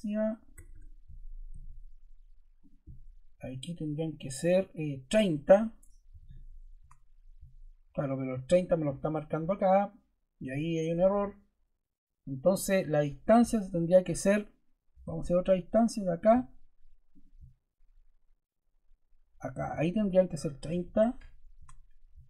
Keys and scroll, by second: 0.5 Escape, 1.4 d, 5.8-6.6 typing, 6.7 Return, 15.0 d, 20.4-21.3 typing, 21.5 Return.